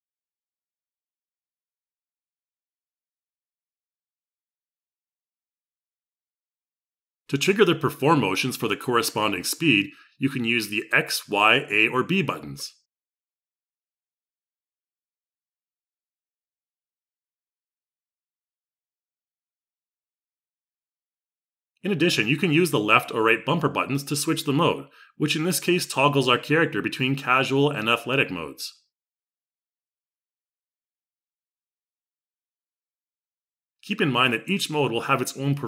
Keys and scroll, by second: 15.7 y.